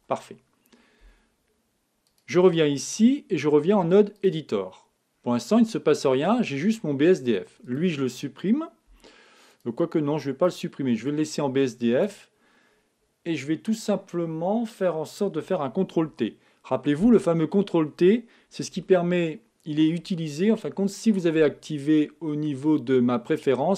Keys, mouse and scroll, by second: 2.0-3.9 drag, 6.2-8.6 middle drag, 7.6-12.9 drag, 16.1 ctrl+t, 17.2-20.7 middle drag, 17.2-18.8 scroll up 1.